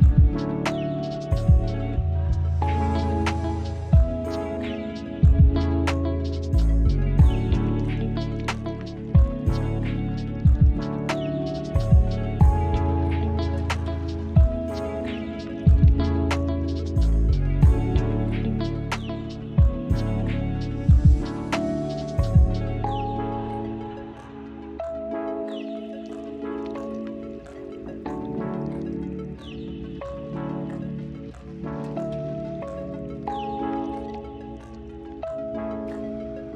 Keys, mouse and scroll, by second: 0.0 click, 0.2 click, 0.3 n, 0.7 click, 1.0-2.1 drag, 2.1 BackSpace, 5.7 click, 6.5 scroll up 1, 7.8 middle drag, 7.9 scroll up 2, 8.1-9.1 middle drag, 9.1-9.9 drag, 10.0-10.3 scroll down 3, 10.9 click, 11.0 middle drag, 11.2 scroll up 4, 11.3-11.8 middle drag, 11.8 click, 12.0 `, 12.5 click, 13.0 `, 13.3 click, 13.8 s, 14.4 s, 14.9 click, 15.4 click, 15.6-15.9 scroll down 1, 15.9 click, 16.2 g, 16.6 click, 18.5 click, 19.5 click, 19.6 middle click, 19.9 scroll down 5, 20.3 click, 20.6 `, 20.7 scroll down 5, 20.8 middle drag, 21.0 click, 21.1 middle click, 21.4-21.8 middle drag, 21.8 shift+d, 22.2 click, 22.5-23.0 scroll down 5, 22.7 click, 23.0 click, 23.4 click, 23.7 `, 23.9 middle drag, 24.0 scroll down 3, 24.0 middle click, 24.2 click, 24.6 middle drag, 24.9 `, 25.0-25.5 scroll up 1, 25.5 s, 26.0 s, 26.3-26.9 middle drag, 26.9 click, 27.9 click, 28.0 click, 28.2 click, 28.3 click, 28.4 middle drag, 28.7 click, 28.8 click, 29.1 `, 29.3 middle click, 29.9 click, 30.2 click, 30.4 middle click, 30.7 click, 30.9 middle click, 31.2 `, 31.5 scroll down 3, 31.7 click, 32.1 click, 32.4 middle click, 32.8 click, 33.1 click, 33.2 scroll down 1, 33.4 s, 33.9 click, 34.0-34.5 scroll up 1, 34.5 scroll up 1, 34.6 middle click, 34.7-35.2 scroll down 10, 34.8 middle click, 35.2 middle click, 35.2 scroll up 1, 35.5 click, 35.8 click, 35.9 scroll down 1, 36.2 click, 36.5 click.